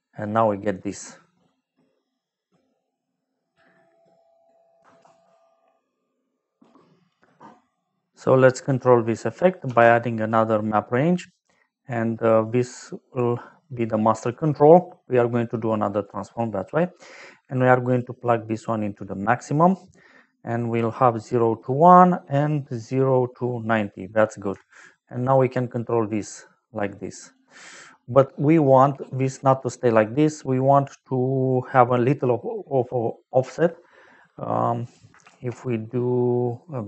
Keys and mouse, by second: 1.7 middle click, 5.0 ctrl+s, 8.6 click, 9.6 shift+d, 10.1 click, 11.1 click, 12.4 click, 13.5 click, 14.2 click, 16.0 click, 17.0 click, 18.9 click, 21.1 click, 24.7 shift+click, 27.9 middle click, 28.7 middle click, 31.0 middle click, 34.8 click, 35.2 shift+a.